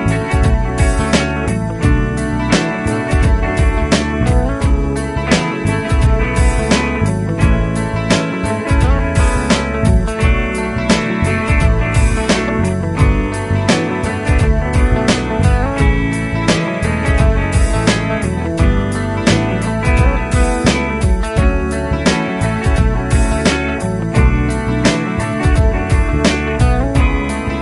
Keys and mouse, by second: 20.0 typing, 21.6-22.3 typing, 23.4 typing.